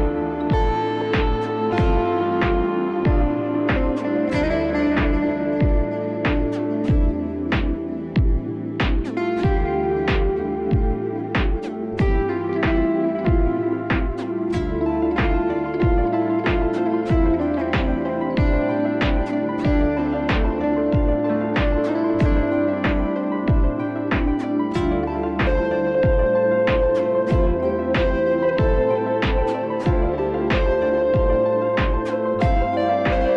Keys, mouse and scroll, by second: 2.1 click, 3.8 click, 6.4 click, 8.0 alt+click, 15.1 click, 15.4 click, 15.7 click, 15.8 click, 16.0 ], 16.4 click, 16.4 ], 16.4 click, 16.6 click, 16.7 click, 16.8 click, 17.4 click, 17.5 click, 17.6-18.1 click, 17.8 click, 17.9 click, 17.9 click, 18.9 click, 20.2 click, 20.9 click, 22.6 click, 23.1 click, 23.4 ctrl+z, 23.8 click, 24.2 click, 24.4 click, 24.5 click, 24.7 click, 25.0 click, 25.2 click, 25.3 click, 25.6 click, 25.8 click, 25.9 click, 26.3 click, 26.9 click, 28.3 click, 29.7 click, 32.0 click.